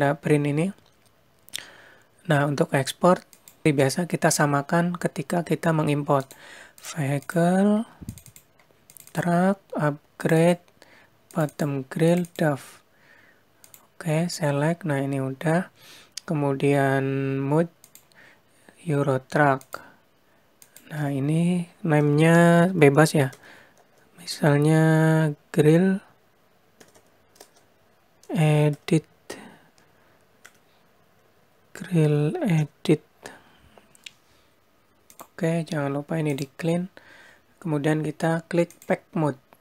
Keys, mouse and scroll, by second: 2.7 click, 18.1 click, 20.9 click, 27.2 l, 36.5 click, 38.9 click.